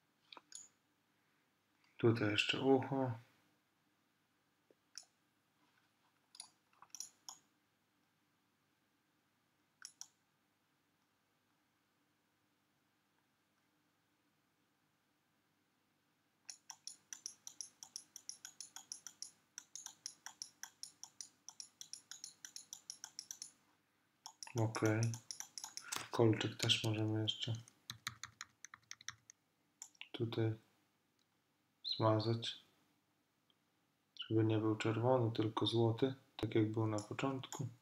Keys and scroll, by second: 26.8 ], 28.0 [, 37.3 ].